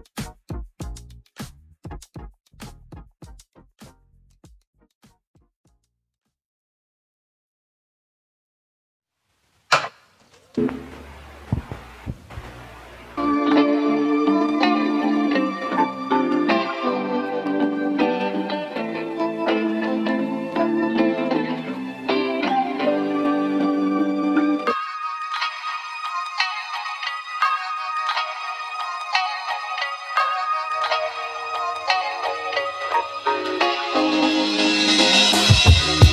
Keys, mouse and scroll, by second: 3.0-5.6 middle drag, 6.1-8.0 middle drag, 8.0 e, 8.7 right click, 9.4 Tab, 9.8 e, 10.8 3, 11.5 click, 11.8 e, 14.1-15.6 middle drag, 15.6 a, 16.5 g, 19.8-21.9 middle drag, 21.9-22.5 scroll down 2, 22.5-27.0 middle drag, 29.0-30.9 middle drag, 30.9 ctrl+r, 31.9 ctrl+r, 35.4 click, 35.9-36.1 middle drag.